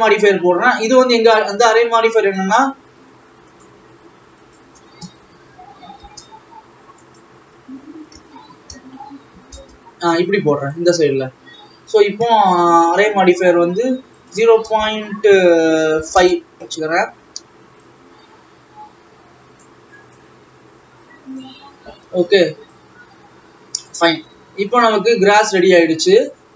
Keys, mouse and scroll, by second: 3.7-10.9 drag, 12.8-13.1 scroll up 1, 14.2-17.3 drag, 17.9-20.3 drag, 21.7-22.9 scroll down 6, 22.9 alt+Left, 24.2-24.9 scroll up 6, 25.1-25.5 ctrl+scroll down 1, 25.5 ctrl+s, 25.7-26.0 scroll down 1, 26.2 click.